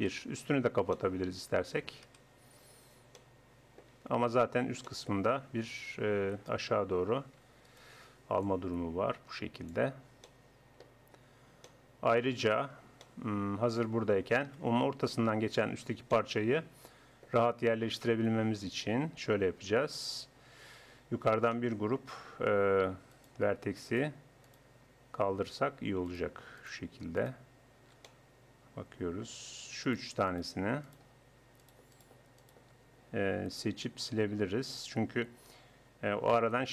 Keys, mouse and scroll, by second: 0.0 KP_1, 2.1 KP_1, 4.5 Tab, 5.9 a, 6.3 a, 7.1 a, 11.1 Tab, 14.5 KP_1, 17.9 KP_7, 20.3 Tab, 23.1-28.9 middle drag, 29.9-34.1 middle drag, 34.7-36.5 drag.